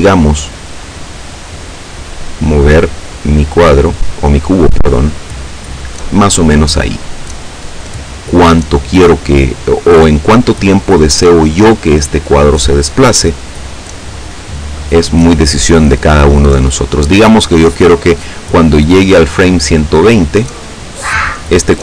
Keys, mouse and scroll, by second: 1.1-6.7 drag, 18.4 click.